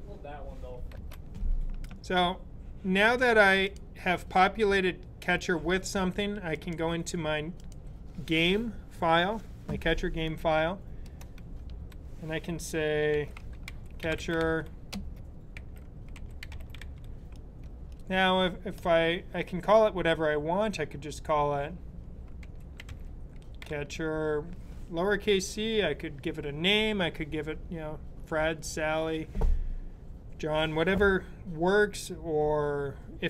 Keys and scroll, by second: 12.9-18.8 typing, 21.9-24.0 typing.